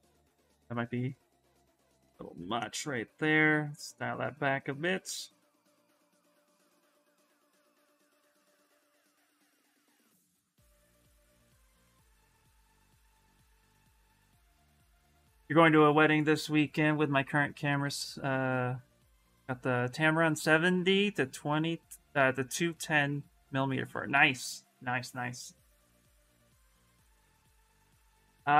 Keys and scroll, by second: 8.1 b, 8.3 v, 8.9 s, 13.4 alt+Tab.